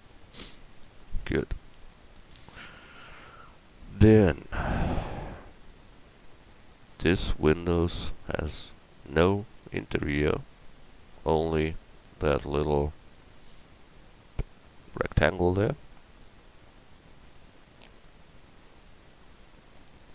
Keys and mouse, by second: 6.2 KP_1.